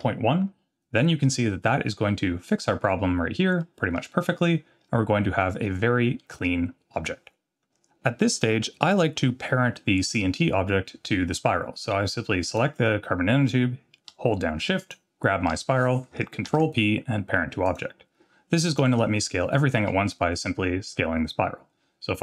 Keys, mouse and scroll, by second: 3.6-3.9 middle drag, 4.8 scroll down 1, 5.6 scroll down 3, 6.2 middle drag, 6.2-6.8 scroll down 4, 12.5 click, 14.8 shift+click, 16.5 ctrl+p, 18.7 click, 19.8 s.